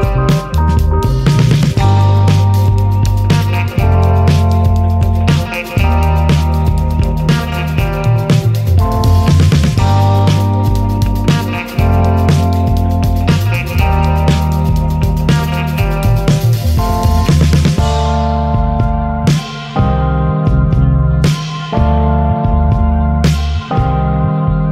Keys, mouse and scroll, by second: 0.1 click, 3.1 click, 5.3 click, 6.8 ctrl+z, 7.5 click, 10.3 click, 13.8 KP_Subtract, 19.3 ctrl+shift+click.